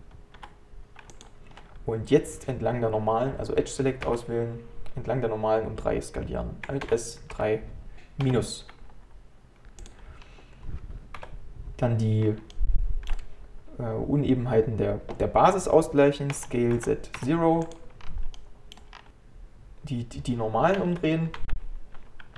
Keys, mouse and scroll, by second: 1.6-4.1 scroll up 1, 4.1 2, 6.8 alt+s, 10.2 scroll down 2, 11.2 KP_1, 12.2 scroll up 1, 12.5-15.7 shift+middle drag, 18.0-18.4 scroll down 2, 18.4 middle click, 19.0 scroll up 3, 19.1-20.8 middle drag, 20.8 a, 21.4 shift+n.